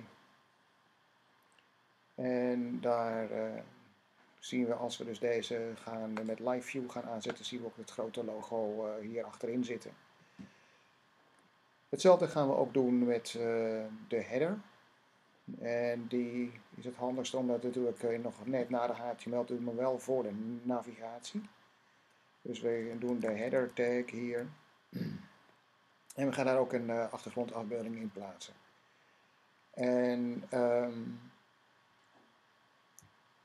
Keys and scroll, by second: 22.6-24.1 typing.